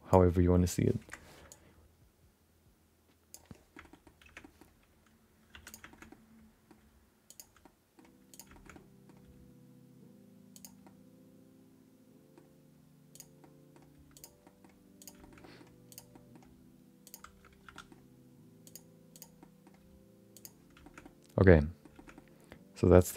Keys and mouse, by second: 1.5-3.6 shift+drag, 3.7 middle click, 3.9 middle click, 4.2 Tab, 4.4 middle click, 5.5 3, 5.6 click, 5.9 shift+middle click, 6.1 middle click, 6.8 g, 7.6 middle click, 8.3 click, 8.5 shift+middle click, 8.7 middle click, 9.2 g, 10.8-12.3 middle drag, 13.1 click, 13.4 middle click, 13.9 g, 14.4 middle click, 15.0 click, 15.2 middle click, 15.4 middle click, 15.9 click, 16.1 middle click, 16.4 g, 17.6 2, 17.7 middle click, 18.6 click, 19.1 click, 19.4 middle click, 19.8 g, 20.8 shift+middle click, 21.0 middle click, 21.9 shift+middle click, 22.1 middle click, 23.1 shift+middle click.